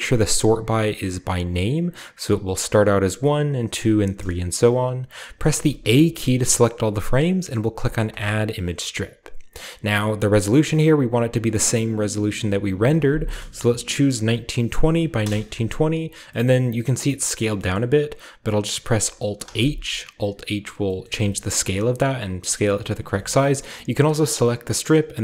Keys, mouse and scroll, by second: 1.5 click, 5.2 click, 5.5 a, 6.0 a, 8.1 click, 9.0-9.7 scroll down 1, 12.6 click, 13.6-14.9 typing, 14.0 click, 15.4 Return, 15.9-17.6 scroll down 1, 16.5-17.6 middle drag, 17.8-19.4 middle drag, 17.8-19.0 scroll down 1, 19.0-19.4 alt+scroll down 1, 19.6 alt+s, 21.1 ctrl+middle drag, 21.7-22.9 ctrl+middle drag, 21.7-22.9 ctrl+scroll up 1, 22.9-23.6 scroll up 1, 23.1 middle click, 23.4 ctrl+middle click, 23.6-25.0 ctrl+middle drag.